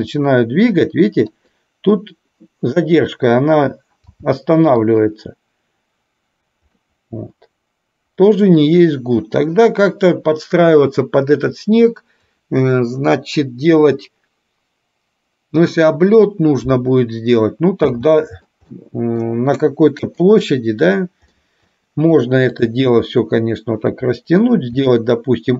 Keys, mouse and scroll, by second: 0.1 g, 4.1 g, 6.9 scroll up 1, 7.0-8.6 middle drag, 8.6 scroll down 1, 18.0 space, 18.9-19.3 middle drag, 19.3 scroll down 1, 20.1 click, 21.4-21.7 middle drag, 22.6-24.0 drag, 24.9 s.